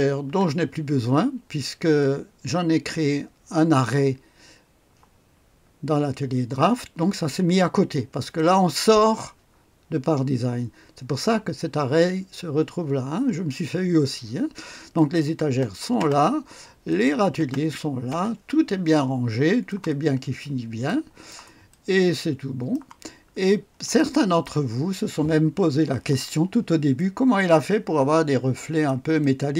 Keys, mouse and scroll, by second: 0.0-0.2 typing, 8.3 click, 14.9 click, 15.5 space, 16.0 space, 16.9 click, 17.4 space, 18.1 space, 18.9-20.1 drag, 20.2-21.3 scroll up 5, 20.9 click, 21.3-23.4 right drag, 21.7-23.4 drag, 23.5-24.5 scroll up 1, 23.9 click, 26.9-29.5 drag.